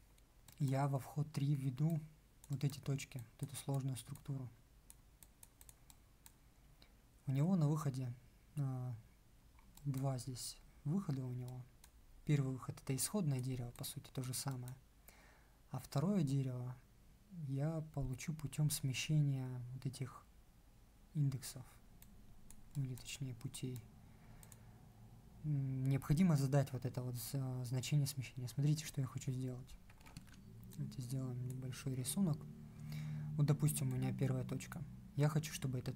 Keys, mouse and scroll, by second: 30.0 ctrl+1.